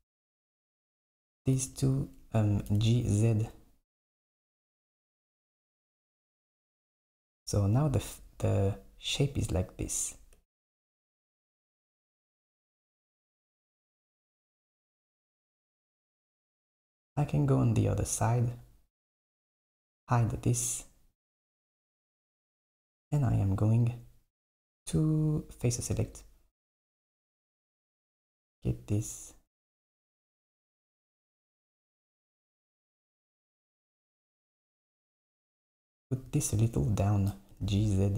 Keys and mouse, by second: 0.3 click, 0.6 alt+click, 1.6 g, 2.7 g, 5.3 Tab, 6.1 KP_1, 10.4 Tab, 11.9 click, 14.6 KP_7, 17.7 click, 19.8 click, 22.3 click, 25.7 click, 27.0 click, 30.1 shift+click, 30.8 shift+click, 31.2 shift+click, 31.9 shift+click, 32.8 shift+click, 33.5 shift+click, 34.7 shift+click, 37.6 g.